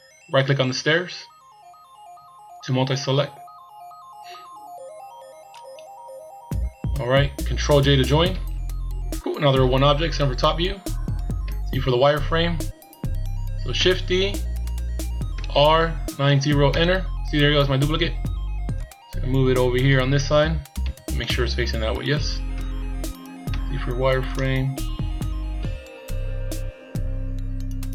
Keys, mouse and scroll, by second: 5.6 shift+right click, 8.7 ctrl+j, 10.0 KP_7, 10.9-11.4 scroll down 1, 11.4 z, 12.0-12.4 scroll down 1, 13.9 shift+d, 18.8 click, 20.8 z, 21.2 scroll down 1, 21.2 middle click, 22.6 KP_7, 23.5 z, 24.3 click, 26.7 scroll up 2.